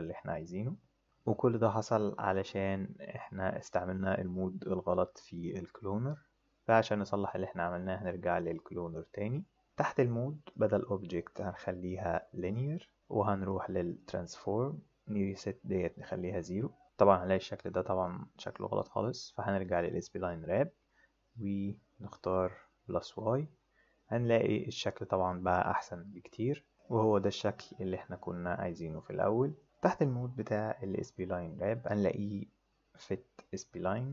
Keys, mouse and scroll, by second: 0.0 click, 10.5 click, 12.1 click, 13.4 click, 15.9 right click, 19.8 click, 22.3 click, 33.9 click.